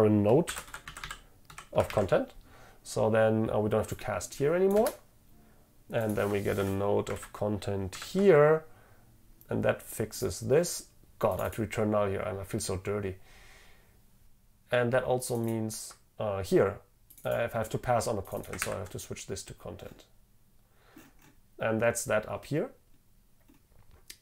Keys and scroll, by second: 2.0 ctrl+v, 8.0 ctrl+v, 18.7 ctrl+v.